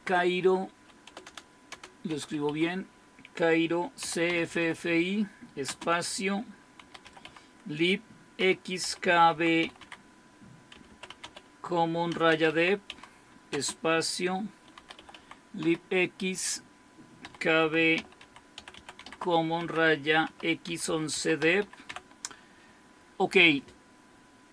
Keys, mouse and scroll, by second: 0.0-22.4 typing.